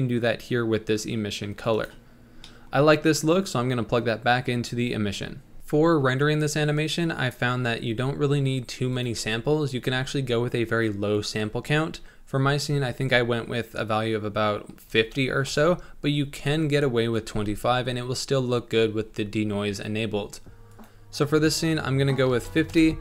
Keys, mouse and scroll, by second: 2.5 scroll down 1, 2.7 middle click, 3.4 click, 5.6-15.5 middle drag, 15.5 click, 22.7 click.